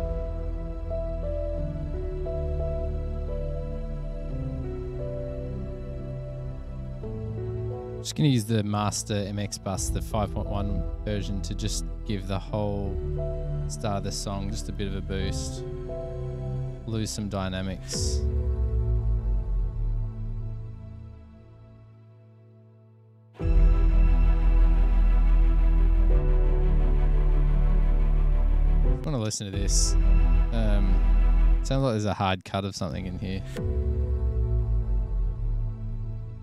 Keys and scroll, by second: 4.8 super+=, 6.3 F8, 9.4 F7, 10.8 F8, 27.8 F7, 29.2 space, 29.5 space, 31.3 super+], 31.4 super+], 33.1 space.